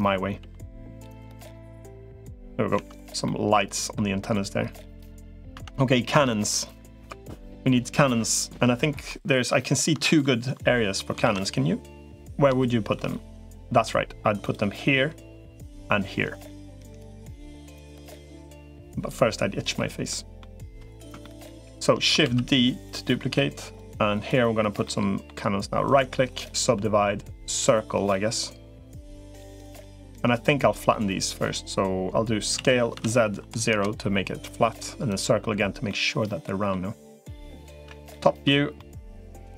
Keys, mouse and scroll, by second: 0.2 g, 2.6 Tab, 3.0 middle click, 4.7 middle click, 5.4 Tab, 8.9 middle click, 11.2 ctrl+s, 12.4 shift+middle click, 13.4 middle click, 14.2 click, 17.2 middle click, 19.9 middle click, 21.0 shift+middle click, 22.0 shift+d, 22.8 click, 23.6 click, 24.6 middle click, 25.8 right click, 27.4 click, 27.9-29.4 middle drag, 32.4 s, 35.0 click, 35.7 middle click, 37.6 KP_7, 38.6 middle click.